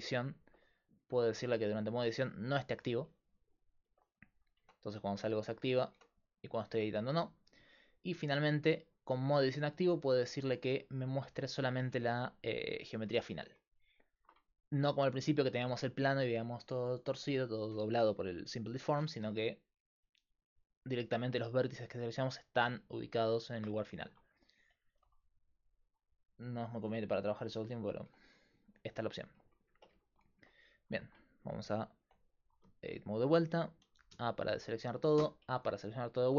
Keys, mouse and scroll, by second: 1.8-3.4 drag, 3.3-4.6 middle drag, 4.6 Tab, 5.4 Tab, 5.9 Tab, 8.5-11.7 drag, 11.7-13.6 middle drag, 12.7-14.4 drag, 12.7 right click, 14.4-19.7 middle drag, 21.8-23.5 right drag, 23.5-26.0 middle drag, 26.0-29.1 drag, 28.1 Tab, 30.3 middle click, 32.0 Tab, 34.2 a, 35.4 a.